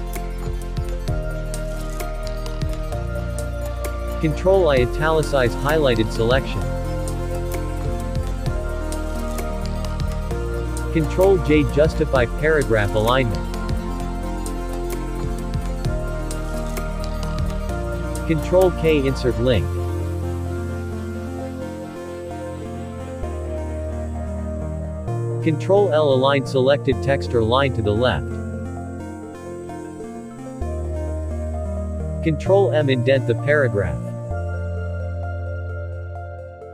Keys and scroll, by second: 1.0 ctrl+h, 8.0 ctrl+i, 15.0 ctrl+j, 22.1 ctrl+k, 29.4 ctrl+l, 36.3 ctrl+m.